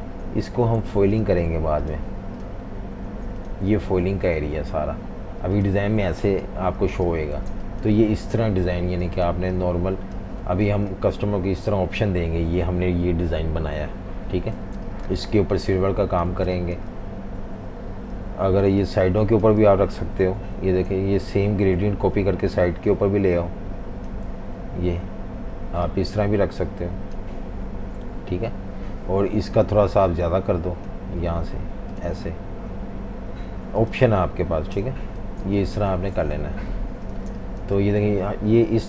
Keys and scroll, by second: 0.1 super+3, 0.8 super+z, 3.1 super+3, 3.7 super+3, 4.5 alt+super+3, 6.5 super+-, 6.7 super+-, 7.4 typing, 8.5-10.6 typing, 14.6 v, 14.7 space, 16.2 v, 16.4 space, 17.9-20.9 typing, 34.7-35.4 typing, 36.5 super+-, 37.3 typing.